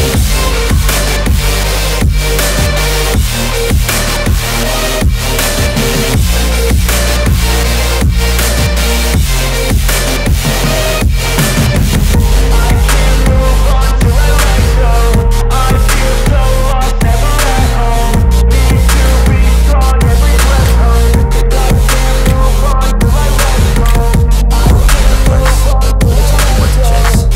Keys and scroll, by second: 1.8 l, 8.0 space, 17.8 c, 18.1 Escape.